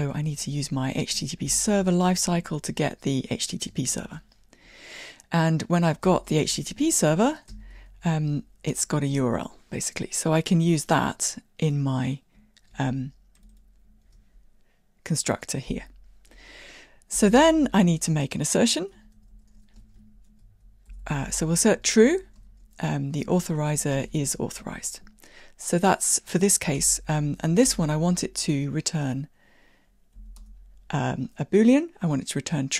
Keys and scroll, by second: 1.4 Tab, 7.2 Tab, 12.8 super+x, 14.1 super+v, 23.8 Tab, 27.0 alt+Return.